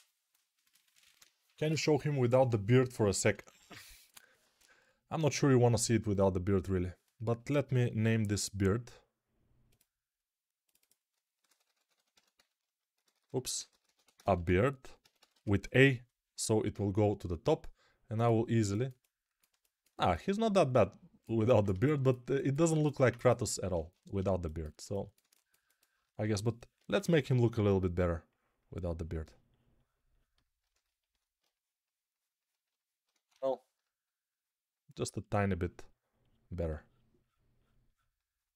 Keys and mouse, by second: 4.3 ctrl+Tab, 6.0-11.1 middle drag, 11.1-18.4 shift+drag, 13.0 BackSpace, 13.7 alt+shift+BackSpace, 18.4-30.3 alt+middle drag, 23.6 ctrl+Tab, 26.1-27.3 typing, 30.3-38.5 ctrl+alt+shift+drag, 33.0 ctrl+z, 33.0-35.3 right drag.